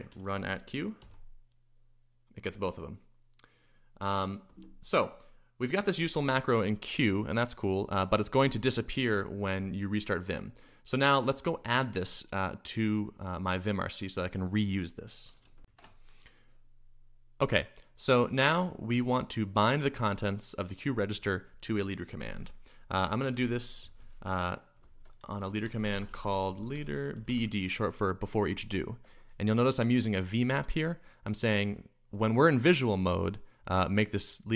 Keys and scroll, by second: 0.0-1.4 typing, 4.4 Escape, 15.6 shift+super+1, 22.6-27.8 typing.